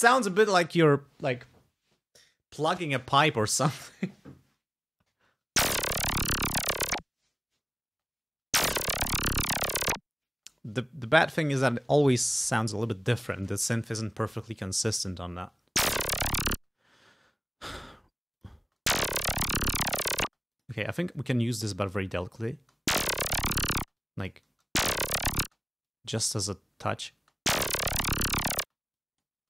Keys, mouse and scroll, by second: 5.4 space, 8.0 space, 10.4 space, 15.6 space, 16.6 space, 16.9-17.3 scroll up 2, 18.4 click, 18.7 space, 20.4 space, 20.6 click, 21.2-22.2 drag, 22.7 space, 23.9 space, 24.1 click, 24.6 space, 25.5 space, 26.0 click, 27.3 space, 28.7 space, 29.0 click.